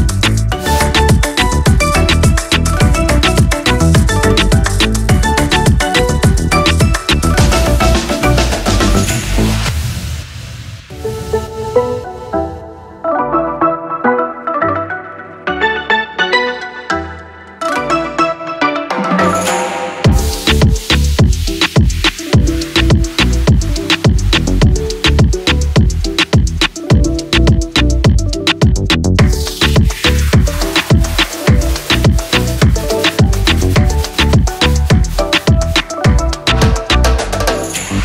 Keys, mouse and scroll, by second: 3.3 click, 5.8-34.9 drag, 10.1 typing, 14.9 typing, 17.7-18.4 typing, 20.7-21.4 typing, 29.4 typing, 37.1 typing.